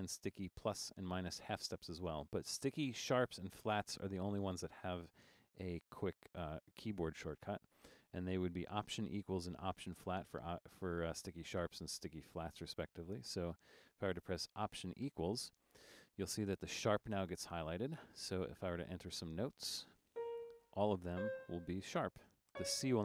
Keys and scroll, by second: 15.1 alt+=, 18.5 Down, 18.7 Down, 18.8 Down, 19.1 Down, 20.1 typing, 21.1 typing, 22.6 typing.